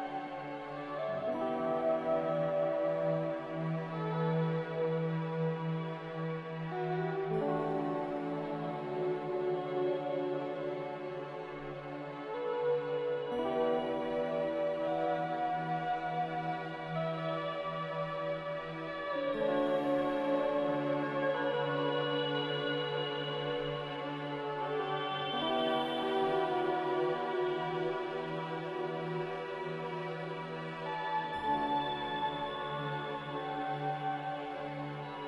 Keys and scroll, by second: 24.0 a, 31.4 4.